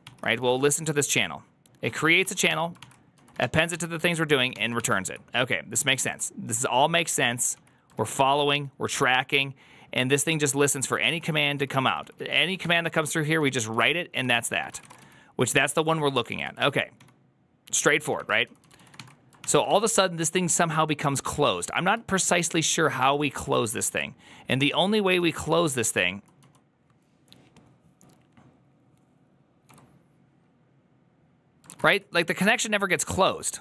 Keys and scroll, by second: 0.0-0.8 typing, 1.8-4.9 typing, 5.9-8.8 typing, 8.8 ctrl+u, 10.3-16.8 typing, 14.2 ctrl+c, 15.4 ctrl+u, 17.9-23.4 typing, 22.5 ctrl+u, 23.6 ctrl+o, 24.5-26.6 typing, 30.8 k, 31.7 ctrl+a, 31.7 2.